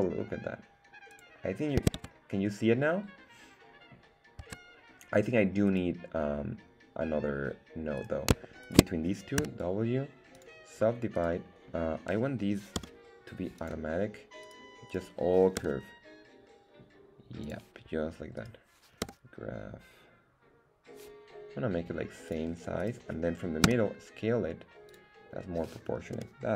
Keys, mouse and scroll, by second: 1.1 click, 2.1 Tab, 4.4 Tab, 5.7 click, 5.7 right click, 8.0 click, 8.0 right click, 8.6 shift+click, 8.6 shift+right click, 9.4 w, 11.1 right click, 12.8 v, 14.4 right click, 14.9 right click, 15.6 g, 17.4 click, 18.4 right click, 19.0 g, 22.3 click, 22.8 right click, 23.7 s, 24.9 click, 26.1 g.